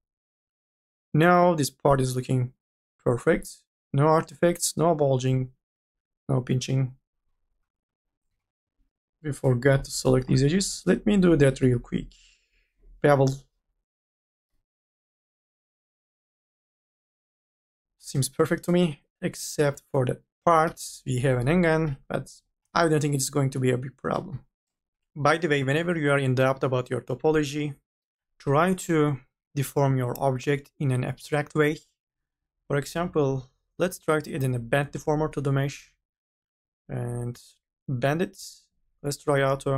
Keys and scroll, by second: 8.6 q, 9.0 e, 9.7 u, 10.0 l, 14.0-15.4 typing, 16.9 n, 19.9 ctrl+z, 20.1-21.4 typing.